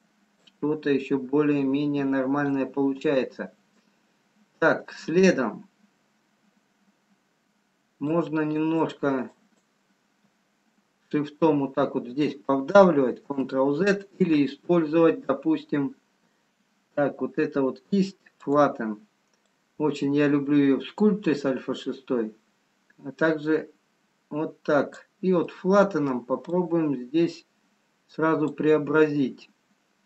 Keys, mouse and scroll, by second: 4.7 middle click, 6.4 scroll up 2, 7.9 scroll down 2, 9.2 shift+click, 9.7 ctrl+click, 13.4 ctrl+z, 18.4 click, 19.4 click, 25.6 middle click, 26.6 click.